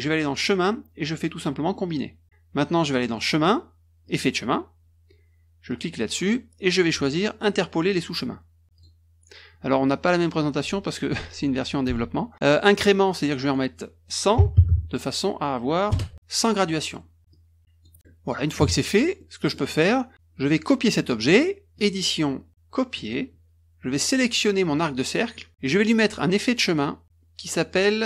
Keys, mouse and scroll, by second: 0.3 click, 1.8 click, 3.1 click, 4.0 click, 5.6 click, 8.7 click, 13.3 click, 15.8 Return, 16.6 middle click, 17.3 click, 19.1 middle click, 21.7 click, 22.9 click, 24.7 click, 26.6 click.